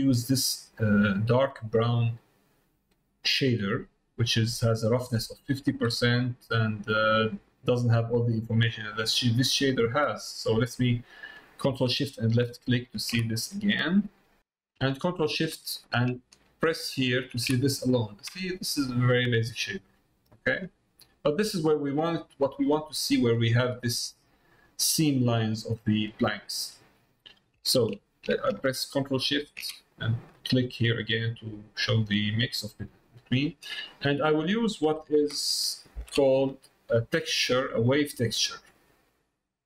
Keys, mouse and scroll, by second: 0.1 middle click, 3.4 middle click, 5.9 middle click, 7.0 middle click, 7.7 middle click, 9.9 middle click, 12.3 ctrl+shift+click, 16.7 ctrl+shift+click, 18.5-20.6 middle drag, 24.9 middle click, 26.8 middle click, 29.2 ctrl+shift+click, 30.0 middle click, 30.9 click, 31.9 middle click, 32.9 middle click, 33.8 middle click.